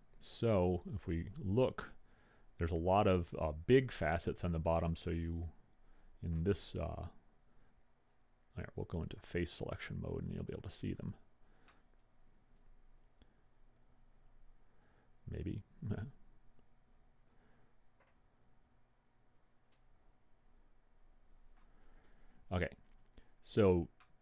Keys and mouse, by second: 3.6 middle click, 10.7-11.8 drag, 12.0-13.6 middle drag, 22.6 KP_1.